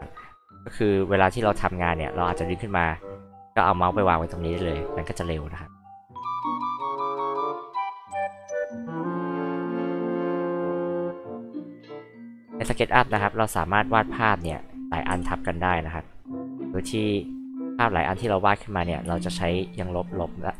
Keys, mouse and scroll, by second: 3.9 alt+click, 5.0 alt+click, 6.1 alt+click, 6.9 alt+click, 7.7 alt+click, 8.2 alt+click, 8.9 alt+click, 9.6 alt+click, 10.2 alt+h, 10.3 alt+click, 11.1 alt+p, 11.2 alt+click, 11.7 scroll down 2, 12.2 alt+h, 12.2 alt+click, 12.6 r, 12.9 click, 13.9 click, 15.1 c, 15.3 click, 15.5-15.8 scroll up 2, 18.4 click, 19.0 e.